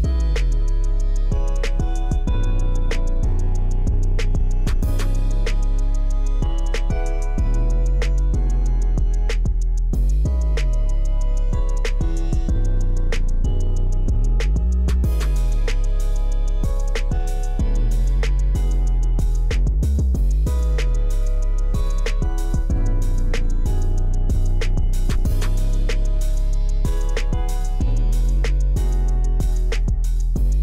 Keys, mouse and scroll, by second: 0.3-0.7 scroll down 1, 1.6-2.1 scroll up 1, 2.7 click, 5.2 click, 8.5-9.4 scroll down 1, 10.1-10.8 scroll down 1, 13.7 middle click, 15.2 click, 16.7 click, 18.1-18.6 scroll down 1, 19.7 click, 21.2 click, 22.2-22.5 scroll down 1, 22.5-25.0 middle drag, 25.5 click, 27.7-28.3 scroll down 1, 28.3 middle click.